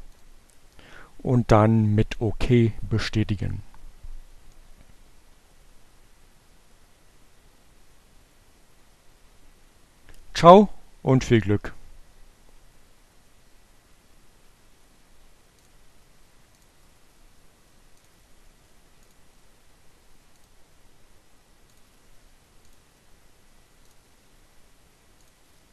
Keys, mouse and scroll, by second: 0.9 click, 2.7 click, 14.0 click, 14.8 click, 16.6 click, 17.8 click, 18.9 click, 20.6 click, 21.7 click, 23.5 click, 24.9 click.